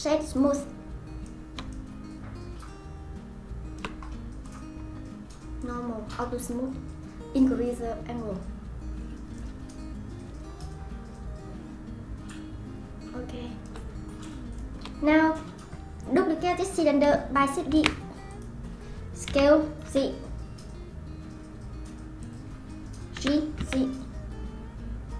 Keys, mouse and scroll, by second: 1.3-4.4 middle drag, 4.4 click, 5.6-6.4 drag, 7.6-9.7 drag, 9.7-13.3 shift+middle drag, 14.2 click, 14.5 click, 17.7 shift+d, 19.3 s, 23.1 g.